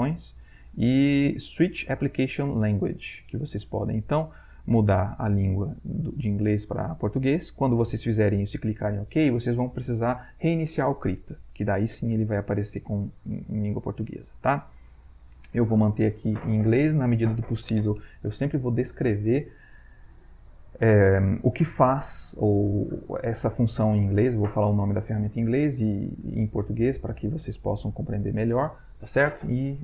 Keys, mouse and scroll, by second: 3.3 click, 5.9 click, 12.1 click, 13.5 click, 14.8 click.